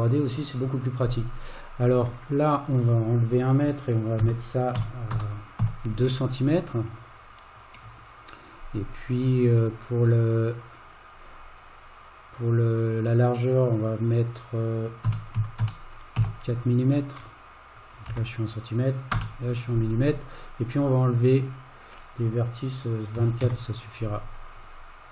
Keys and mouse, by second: 2.3-9.5 drag, 10.5-21.1 drag, 23.2 KP_2, 23.5 KP_4, 24.6-25.1 drag.